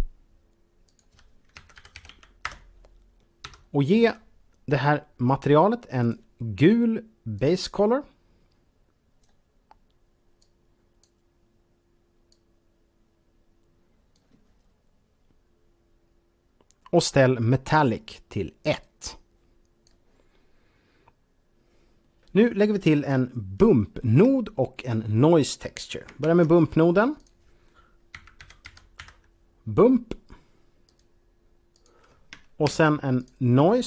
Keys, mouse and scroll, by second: 0.9 click, 1.4-2.1 typing, 2.5 Return, 3.3 Home, 4.5-5.0 scroll up 2, 5.9 click, 7.4 click, 10.4 click, 12.3 click, 18.8 click, 22.8-23.2 scroll down 2, 23.8 shift+middle click, 26.1 shift+a, 27.0 click, 28.0-28.8 typing, 30.9 click, 31.8 click, 32.5 shift+a, 33.2 click.